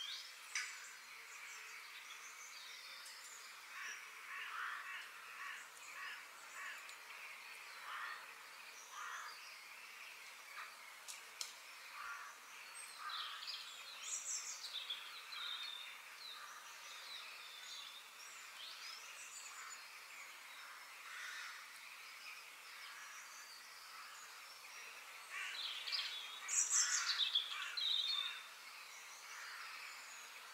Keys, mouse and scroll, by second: 0.4-2.6 middle drag, 2.6-3.0 scroll down 2, 3.0-4.9 middle drag, 14.3 scroll down 2, 14.6-16.6 middle drag, 18.6 click, 19.3 click, 19.9 shift+d, 24.2 f, 26.2 g, 29.5 g.